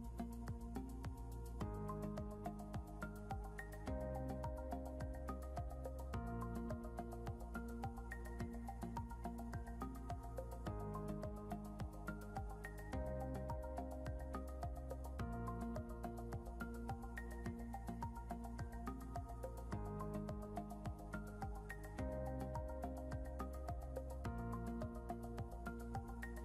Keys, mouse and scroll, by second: 3.7 right click, 13.9 right click, 14.9 scroll down 1, 25.3 F12.